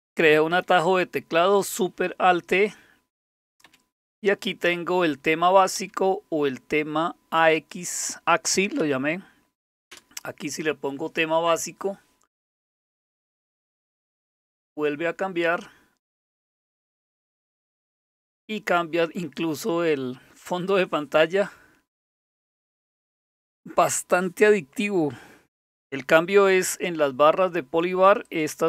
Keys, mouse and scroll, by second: 0.5 alt+super+t, 3.3 Down, 3.6 Up, 5.8 Down, 8.8 Up, 9.9 Return, 26.5 click, 28.2 click.